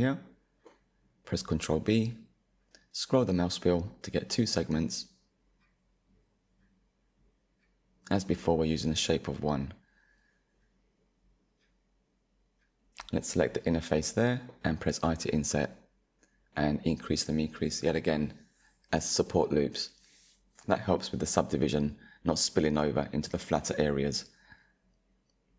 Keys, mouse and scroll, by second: 0.2 ctrl+b, 8.4-9.0 scroll down 2, 9.0-10.8 middle drag, 10.8 click, 16.1-17.3 drag, 17.5 middle click, 18.3-19.5 scroll up 2, 19.8 ctrl+r, 22.3-24.5 drag, 24.5 Tab.